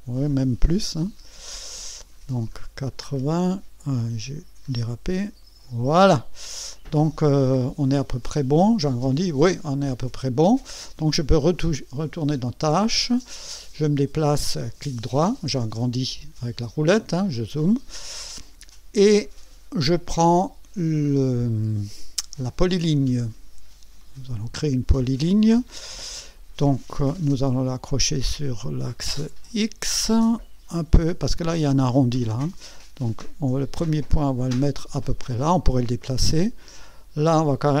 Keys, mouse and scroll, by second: 1.1-1.4 scroll up 2, 1.7-3.1 scroll up 8, 4.2-5.2 scroll up 6, 8.2-8.5 scroll up 2, 9.3-9.7 scroll down 2, 11.3 click, 14.2-15.5 right drag, 15.6-15.9 scroll up 1, 24.0 click, 25.7 scroll up 1, 35.3 click.